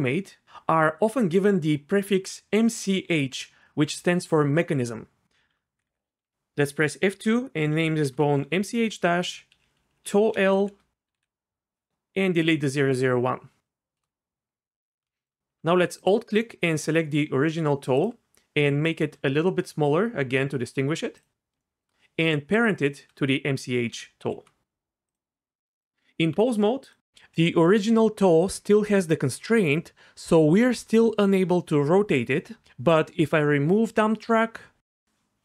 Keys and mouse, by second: 5.5 F2, 5.8 Left, 9.5 Right, 9.6 Right, 9.9 Right, 10.0 Right, 10.6 ctrl+shift+Right, 11.2 BackSpace, 19.0 s, 21.6 shift+click, 24.2 ctrl+p, 25.9 Tab, 30.1 r, 30.5 r, 31.7 right click, 32.2 ctrl+z, 34.6 click, 34.9 click.